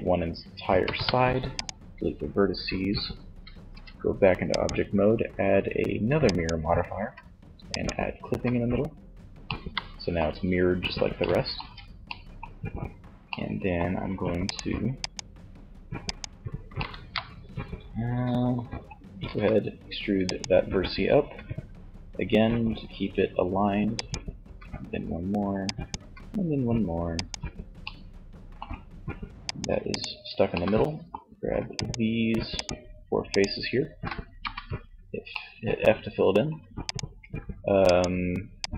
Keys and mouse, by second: 0.0 x, 2.7 Tab, 6.8 click, 7.6 z, 10.7 Tab, 13.7 middle click, 15.7-17.1 middle drag, 18.4 e, 19.3-21.3 drag, 20.3 e, 23.5 e, 24.9 click, 25.0 e, 26.9-27.9 drag, 28.7-30.6 middle drag, 33.6 shift+f, 36.2-38.7 right drag.